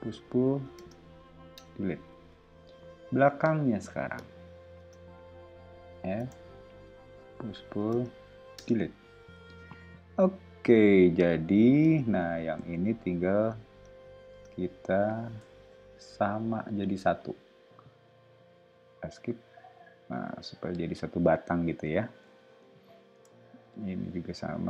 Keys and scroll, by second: 0.7 space, 1.5 BackSpace, 2.3 o, 4.7-9.3 typing, 14.3 space, 15.4 p, 18.3 ⟲, 22.2 o, 23.5 ⟲.